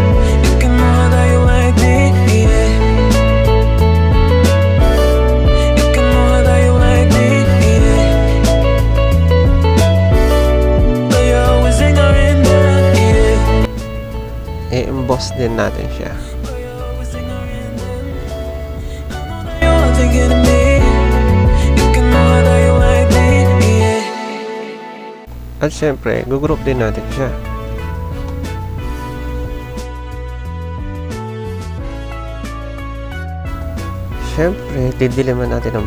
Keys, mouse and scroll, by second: 3.6 click, 5.7 click, 6.1 click, 6.8 click, 11.1 click, 14.0 click, 15.8 click, 16.6-18.3 drag, 19.3-21.8 drag, 22.1-23.3 drag, 25.5 click, 26.0 ctrl+g, 27.5-28.6 typing, 32.0 typing.